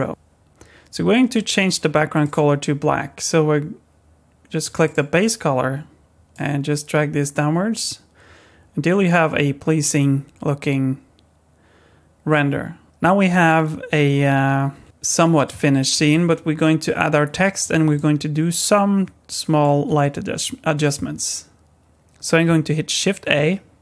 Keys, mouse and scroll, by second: 2.2 click, 5.2 click, 17.9 middle click, 23.2 shift+a.